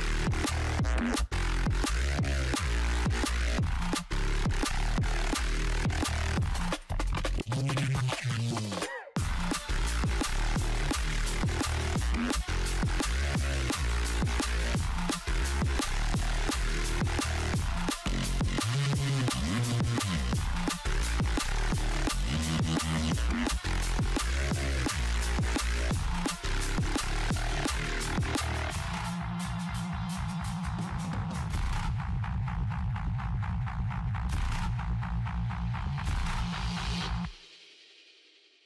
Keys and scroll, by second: 0.2 ctrl+t, 14.2 ctrl+t, 18.6 ctrl+t, 21.4 ctrl+z, 29.9 ctrl+Down, 34.6 ctrl+Up, 35.2 ctrl+-, 35.9 ctrl+9, 36.4 ctrl+0, 36.7 ctrl+=.